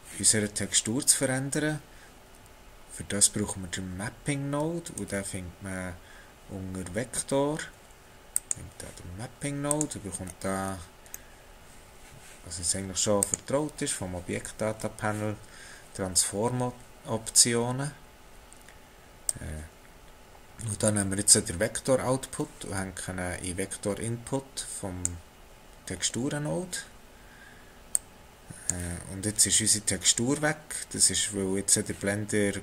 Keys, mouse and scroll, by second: 4.9 shift+a, 10.2-11.2 scroll up 6, 11.2 middle click, 11.6 n, 13.2 click, 18.2 click, 19.3 click, 25.9-27.9 scroll down 4, 27.9 click.